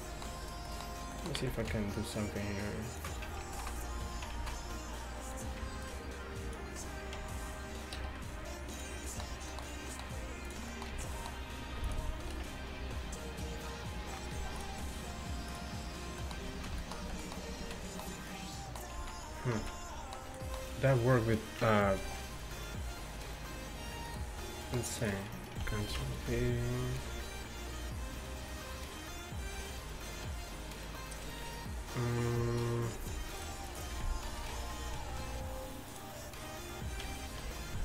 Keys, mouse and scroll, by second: 0.5-3.5 right drag, 0.7-3.5 middle drag, 1.5 z, 2.0-4.3 drag, 3.5 ctrl+z, 4.4 ctrl+z, 5.3 right click, 5.9-7.6 middle drag, 7.6 click, 8.0 ctrl+c, 9.2-10.5 middle drag, 10.5-14.2 drag, 11.0 z, 12.4 ctrl+v, 16.6 ctrl+z, 17.6 z, 19.0 z, 19.6 z, 22.0 ctrl+c, 24.7 middle click, 25.0-29.2 drag, 26.0 ctrl+v, 33.0 a, 33.4-34.7 drag, 34.5 ctrl+v, 37.5 ctrl+a.